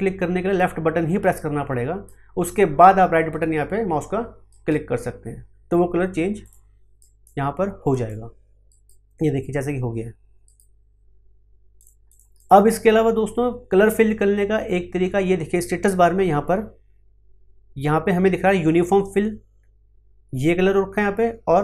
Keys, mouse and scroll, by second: 0.5-4.5 drag, 4.5 right click, 6.4 click, 8.7 right click, 11.8 click.